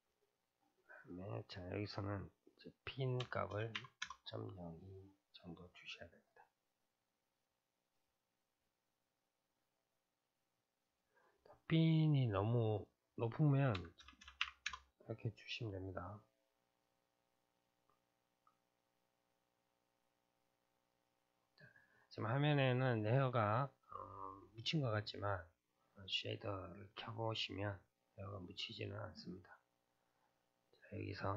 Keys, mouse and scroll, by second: 0.9-4.0 drag, 4.9-7.3 middle drag, 7.3-14.2 drag, 14.2 KP_0, 16.8-20.7 drag, 21.0 click, 21.6-26.1 middle drag, 26.1 click, 28.0-29.4 middle drag, 29.4-30.6 scroll up 1, 30.6-31.3 scroll down 8.